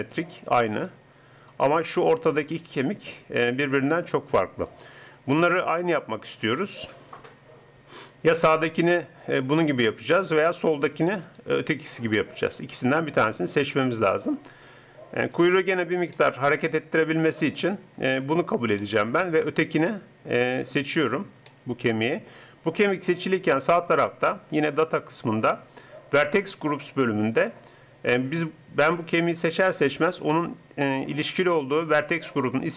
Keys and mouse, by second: 6.5 middle click, 11.4-13.0 drag.